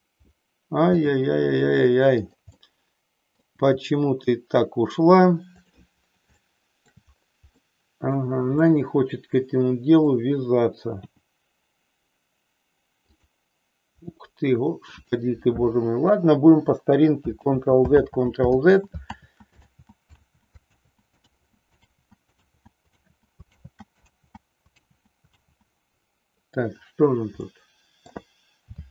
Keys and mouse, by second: 1.0 g, 2.2 click, 2.6 middle click, 3.6 g, 6.4 middle click, 7.6 middle click, 8.6-10.1 middle drag, 11.0 r, 13.1 click, 14.1 middle click, 20.2 ctrl+z, 20.8 ctrl+z, 21.2 ctrl+z, 21.8 ctrl+z, 22.6 ctrl+z, 22.9 ctrl+z, 23.5 ctrl+z, 24.0 ctrl+z, 24.9 ctrl+z, 25.2 ctrl+z, 27.4 middle click.